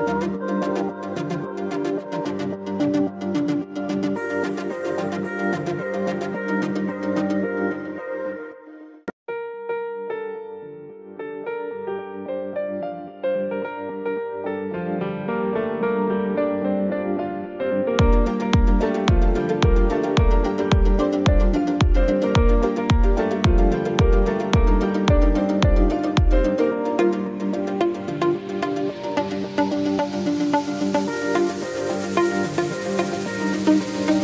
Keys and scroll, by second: 10.2 ctrl+z, 31.2 space.